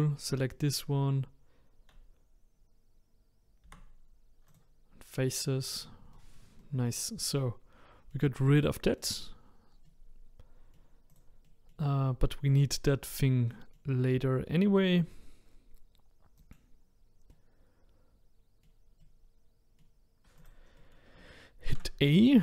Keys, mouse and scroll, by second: 0.5-4.6 middle drag, 4.6 Delete, 5.3-16.5 middle drag, 16.5 click, 17.3-20.4 middle drag, 20.4 click, 20.8-22.4 middle drag.